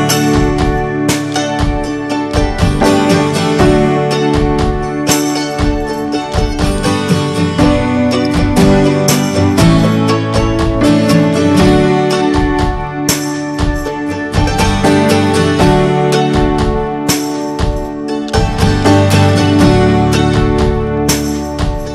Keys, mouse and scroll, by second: 1.5 click, 2.0-3.8 alt+middle drag, 3.8 click, 6.2 drag, 6.6 middle click, 7.1 ctrl+s, 7.3 click, 11.1 drag, 11.5 click, 11.8-12.6 middle drag, 12.6 scroll up 1, 13.0 drag, 13.8 ctrl+a, 15.2 ctrl+j, 15.5 drag, 16.0-18.2 middle drag, 18.2 scroll up 1, 18.4-19.8 shift+middle drag, 19.8 ctrl+s, 20.1 drag, 20.3 scroll down 3, 20.5-21.1 middle drag, 21.1 ctrl+s, 21.7 click.